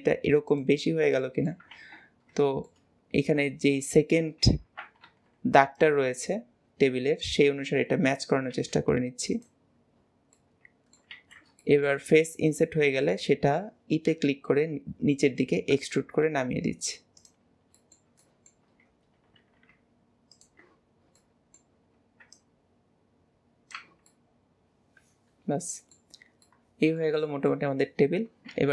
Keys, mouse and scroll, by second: 0.9-1.3 scroll down 2, 1.3 shift+middle click, 1.8 ctrl+z, 2.2 scroll up 1, 2.5 shift+middle click, 2.9 middle click, 3.6 middle click, 7.9 scroll, 9.8 scroll, 9.9-10.4 scroll down 6, 10.4 middle click, 11.1 alt+z, 11.6 shift+middle click, 12.2 middle click, 12.9 middle click, 13.3 shift+middle click, 14.1 e, 17.5 scroll down 2, 17.8-18.8 middle drag, 18.8 scroll up 1, 19.2 g, 20.9-21.2 scroll down 1, 21.2-22.3 middle drag, 22.3 click, 23.8 Tab, 24.1-24.4 middle drag, 25.4 middle click, 26.2 scroll down 2, 26.5-27.3 middle drag.